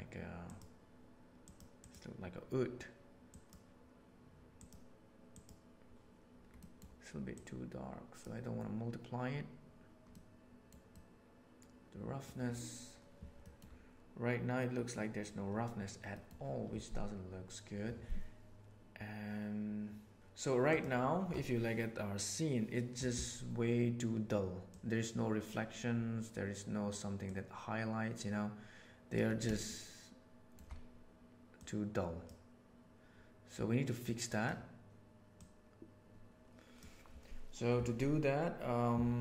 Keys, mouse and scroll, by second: 6.6 middle click, 7.3 click, 10.2 middle click, 11.0-12.2 middle drag, 13.5 middle click, 16.0 middle click, 24.6 click, 27.3-29.2 drag, 29.7 shift+middle click, 31.5 click, 34.0 click, 35.3-36.7 drag.